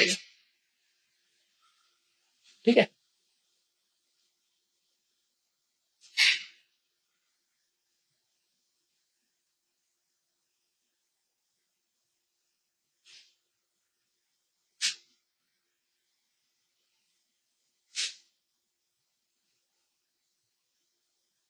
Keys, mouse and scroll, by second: 0.7 space, 0.9 ctrl+click, 1.6 click, 2.3 ctrl+click, 3.0-9.9 drag, 9.9-14.5 drag, 14.5-17.3 drag, 17.3 ctrl+space, 18.8 ctrl+click, 18.8 ctrl+space, 19.3 click, 19.7 space, 20.0 click, 20.2 space, 20.3 click, 20.4 space.